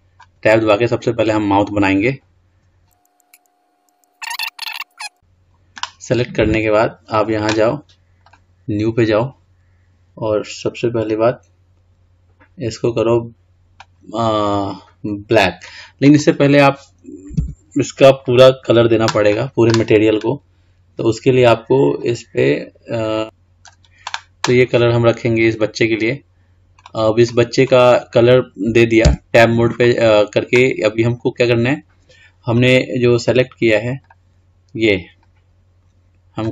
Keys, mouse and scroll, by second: 2.6 scroll up 4, 2.8 click, 2.9 click, 3.8 click, 4.2 right click, 4.5 click, 4.9 click, 7.3 click, 8.4-11.5 drag, 17.6 Tab, 18.3 click, 22.1 click, 24.8-25.8 scroll down 3, 25.8-28.3 scroll up 6, 28.3 click, 34.2 click, 35.3 click.